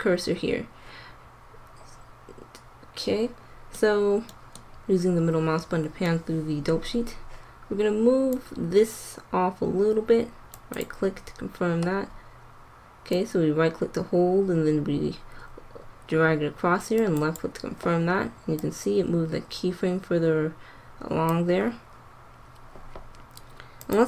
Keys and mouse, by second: 10.2-13.0 drag, 18.6-20.3 drag, 23.7-24.0 drag.